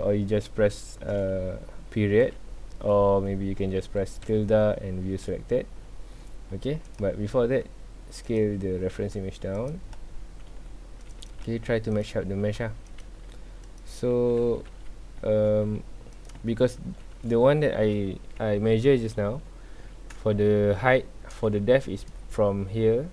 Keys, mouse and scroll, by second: 2.2 KP_Decimal, 2.9 scroll down 1, 4.2 `, 5.8 scroll down 1, 6.8 click, 8.4 click, 8.5 scroll up 1, 8.9 s, 9.8 scroll up 1, 10.5 s, 16.4-16.9 shift+scroll up 2, 16.5 shift+middle drag, 18.2 scroll down 1, 19.3 scroll up 1, 20.2-20.9 shift+middle drag, 20.9-22.8 scroll down 1.